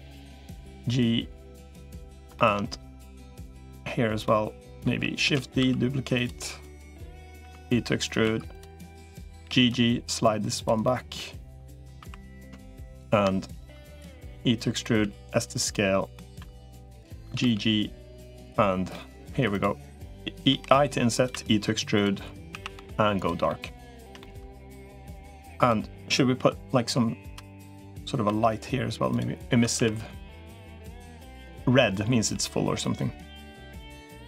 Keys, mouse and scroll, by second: 1.7 middle click, 2.1 shift+middle click, 2.9 click, 3.2 middle click, 4.1 middle click, 5.1 shift+d, 5.5 s, 6.6 middle click, 7.3 e, 8.1 2, 8.3 click, 8.6 middle click, 9.3 g, 10.6 middle click, 11.4 shift+middle click, 11.9 3, 12.1 click, 14.1 e, 14.9 s, 15.5 middle click, 16.3 2, 16.5 click, 17.1 g, 18.7 middle click, 19.3 click, 19.3 3, 20.3 i, 21.1 e, 22.3 a, 22.5 g, 23.3 middle click, 24.0 shift+middle click, 26.3 i, 27.3 click, 28.1 e, 29.5 a, 29.7 g, 32.1 g, 34.0 middle click.